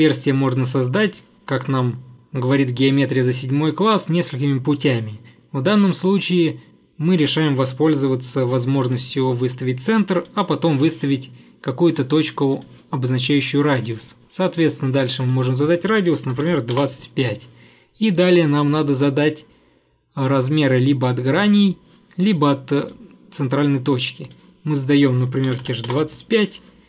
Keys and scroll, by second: 16.1-17.0 typing, 25.2-26.1 typing.